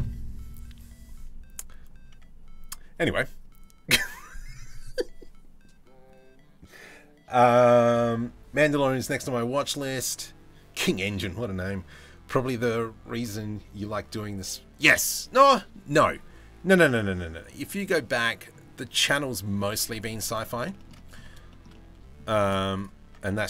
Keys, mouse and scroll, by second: 18.6 middle click, 20.4 shift+middle drag, 20.5 middle drag, 21.1 shift+middle drag, 21.3-21.8 middle drag, 22.0 shift+middle click, 22.6 Tab, 23.0 a, 23.2 s.